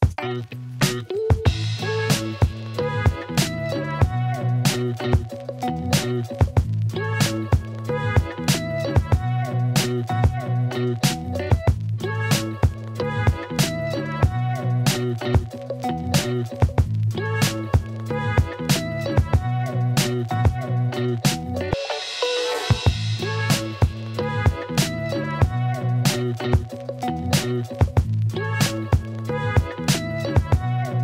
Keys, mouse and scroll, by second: 0.5 shift+a, 2.5-3.3 alt+drag, 3.7 Tab, 4.3 3, 6.3 alt+e, 10.6 2, 10.9 alt+click, 15.6 alt+click, 15.8 alt+middle click, 16.3 ctrl+alt+click, 17.2 shift+click, 19.1 alt+middle click, 19.6 ctrl+middle click, 20.1 ctrl+alt+middle click, 21.2 ctrl+b, 29.3 Tab, 29.6-30.6 alt+drag.